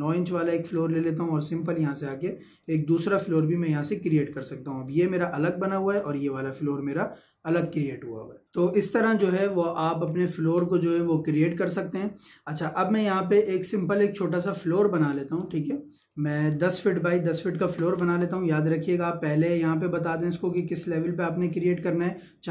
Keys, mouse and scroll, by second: 0.3-0.8 scroll down 1, 0.8 middle click, 1.7 click, 2.8 Escape, 3.3 click, 4.2 Escape, 4.8 click, 5.5 Escape, 6.0 click, 8.6 scroll up 1, 8.9 middle click, 9.0 Escape, 9.4 click, 10.3 Delete.